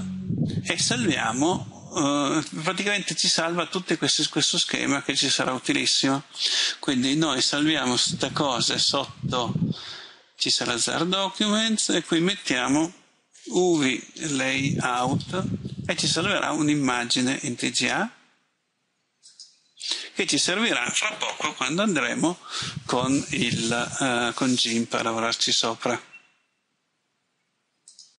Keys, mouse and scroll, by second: 13.4-15.8 typing, 17.9 click.